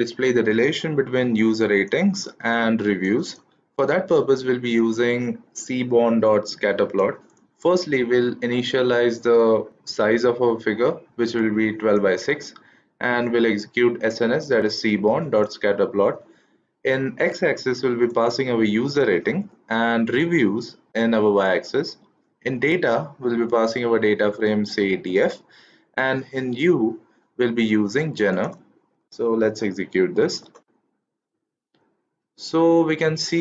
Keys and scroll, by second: 29.1 shift+Return.